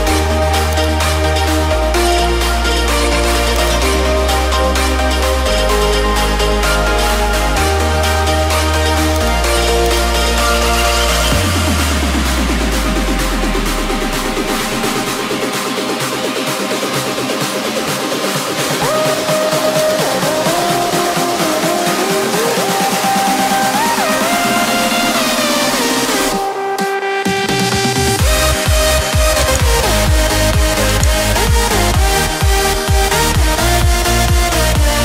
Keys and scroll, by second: 2.0 Return, 7.8 ctrl+t, 17.3 Return.